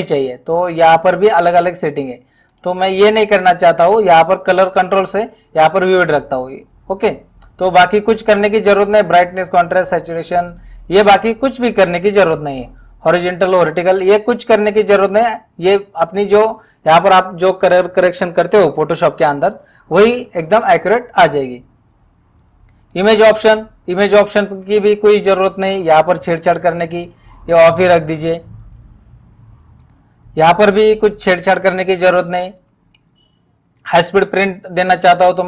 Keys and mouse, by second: 1.4 click, 4.4 click, 16.2 click, 22.9 click, 27.7 click, 30.4 click, 31.9 click.